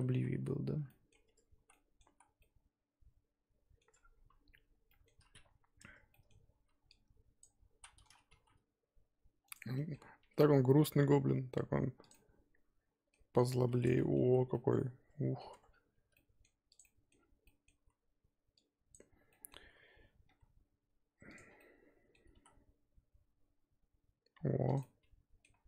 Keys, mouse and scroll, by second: 0.3 ctrl+z, 0.9 middle click, 1.3 Tab, 1.6 z, 1.7 middle click, 2.0 z, 2.4-3.9 middle drag, 3.9 scroll up 4, 4.8-5.3 scroll up 3, 4.9 middle click, 5.8 Tab, 6.1 middle click, 6.6 z, 7.4 click, 7.7 z, 8.3 g, 9.6 scroll down 3, 9.7 middle click, 10.2 g, 12.2-13.3 middle drag, 13.3-13.7 scroll up 4, 13.7-14.5 scroll down 6, 13.8 Tab, 14.0 middle click, 14.2 z, 14.5 middle click, 15.4 scroll down 1, 15.5 Tab, 15.5-16.8 scroll up 3, 16.8 z, 16.8 middle click, 17.1 scroll up 1, 17.4 middle click, 17.7 z, 18.9 click, 19.2 z, 19.3 middle click, 19.6 z, 19.8-20.2 scroll down 2, 20.2 s, 21.4 scroll down 1, 21.6 middle click, 22.3 s, 24.8 middle click, 25.5-25.6 scroll up 4.